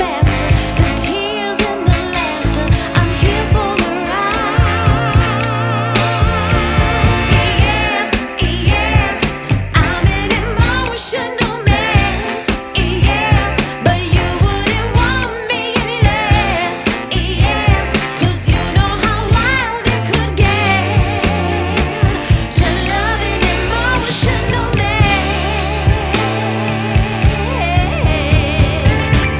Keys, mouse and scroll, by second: 0.1 click, 2.1 click, 6.3 scroll up 1, 6.3 scroll down 1, 6.5 scroll up 2, 6.9-8.0 scroll down 3, 8.0 click, 11.2 click, 12.8 KP_0, 15.4 click, 19.6 scroll up 1, 22.1 click.